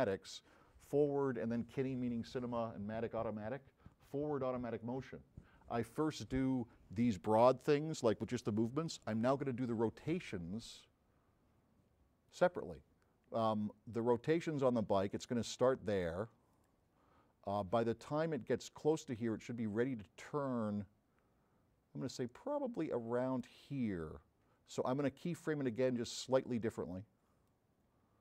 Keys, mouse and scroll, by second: 12.3 click, 16.6 click, 18.0-23.5 drag, 25.3-26.6 drag, 27.5 click.